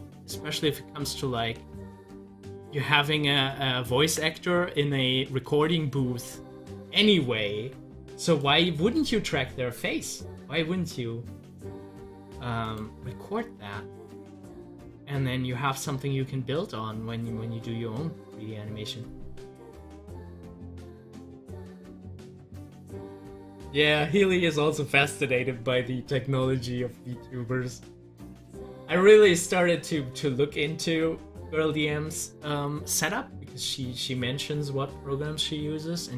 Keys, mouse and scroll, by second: 1.6 ctrl+z, 8.3 click, 12.6 click, 21.4-26.1 drag.